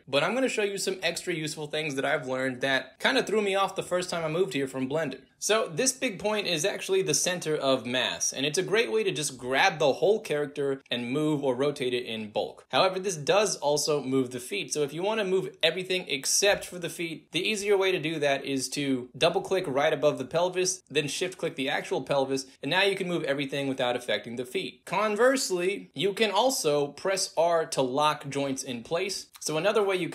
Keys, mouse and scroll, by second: 0.0 alt+click, 0.6 alt+z, 0.9-2.4 alt+drag, 2.9-5.3 alt+drag, 5.4 alt+middle click, 5.6 alt+right drag, 5.9 alt+drag, 6.9 alt+click, 8.3 click, 9.4-11.4 drag, 11.6 ctrl+z, 12.1 alt+drag, 12.1 alt+right click, 12.3 alt+drag, 13.1-14.8 alt+drag, 15.2 ctrl+z, 16.4 click, 16.9 alt+right drag, 17.2-17.7 alt+drag, 19.5 alt+click, 20.7 shift+click, 21.6 alt+right drag, 22.0 alt+click, 22.8-27.5 alt+drag, 27.9 ctrl+z, 28.4-29.6 drag, 30.0 shift+click.